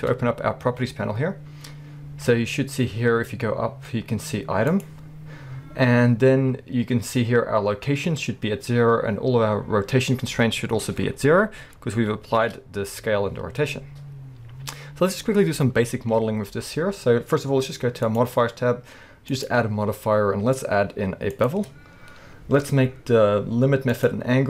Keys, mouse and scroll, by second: 0.1 n, 4.7 click, 11.0-11.7 scroll down 2, 11.7-12.3 scroll up 2, 12.3 ctrl+a, 13.8-14.2 scroll down 1, 14.2-18.1 scroll up 1, 18.1 click, 19.3-24.1 drag.